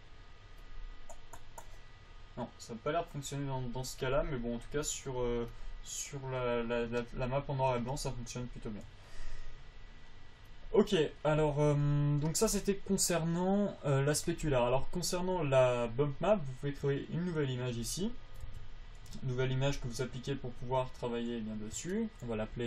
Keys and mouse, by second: 2.3-6.0 drag, 16.1-18.9 drag, 18.9 Tab.